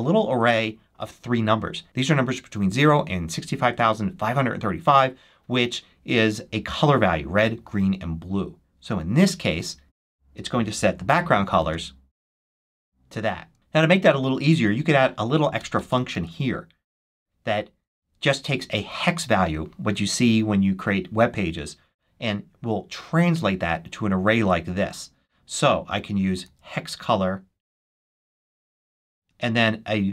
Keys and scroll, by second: 9.8 super+s, 11.5 shift+super+1, 13.5 super+c, 15.5 Return, 16.0 super+Return, 17.1 super+v, 26.3 super+c, 28.5 super+v, 29.0 shift+super+9, 29.7 shift+9.